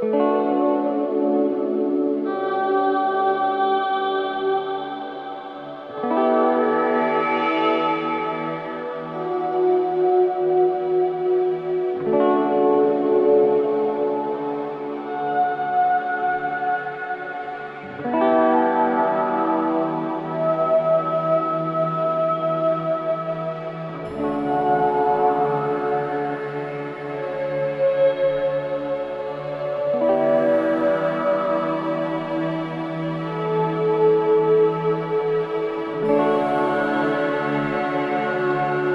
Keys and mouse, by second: 0.2 click, 2.2 click, 4.9 Escape, 6.0 click, 7.1 click, 8.5 click, 9.3 3, 9.9 click, 11.7 g, 12.5 click, 14.4-15.7 drag, 16.2-18.5 drag, 17.0 typing, 18.7 typing, 19.9 click, 21.6-23.8 alt+drag, 24.2-25.3 alt+drag, 26.2 click, 27.4-29.5 alt+drag, 30.2 click, 31.0-31.3 typing, 32.1-34.8 alt+drag, 37.5 alt+click, 38.3 typing.